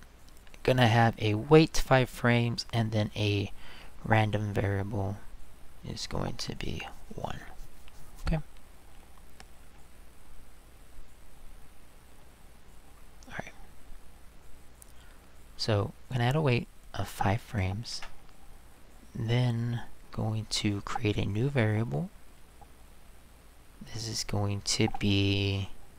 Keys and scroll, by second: 17.5 5, 17.9 Return.